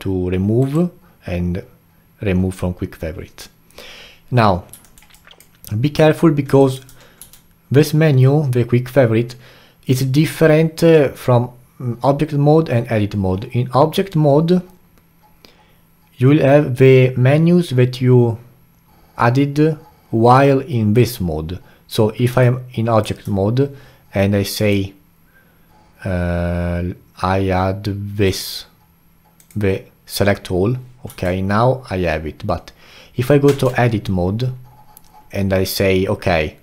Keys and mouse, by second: 4.8 alt+middle click, 5.1-7.2 alt+drag, 7.2 q, 22.4-27.6 alt+drag, 31.1 q, 33.5 Tab.